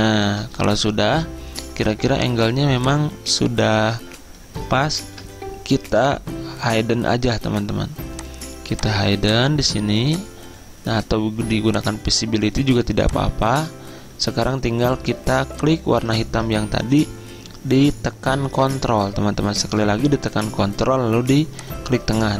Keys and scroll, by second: 3.0 v, 5.1 Return, 16.3 ctrl+z.